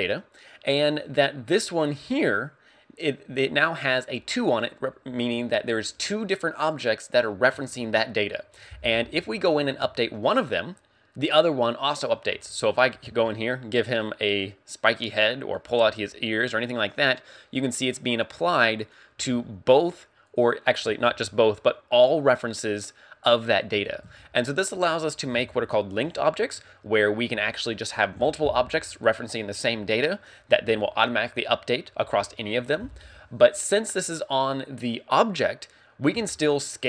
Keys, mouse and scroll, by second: 9.9 Tab, 12.4 a, 12.6 right click, 12.9 g, 15.0 right click, 15.5 right click, 15.9 g, 18.9 right click, 19.2 a, 20.3 right click, 20.9 g, 23.7 right click, 24.0 Tab, 24.0 a, 35.7-36.1 scroll down 3, 36.2 s.